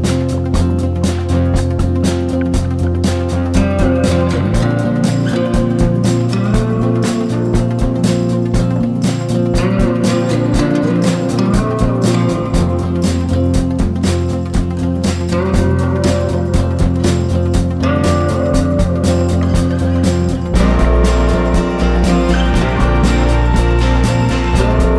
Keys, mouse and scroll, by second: 21.2 ctrl+scroll up 1, 22.0-22.4 ctrl+scroll down 1, 22.5-23.0 ctrl+scroll down 1, 23.0-24.0 drag.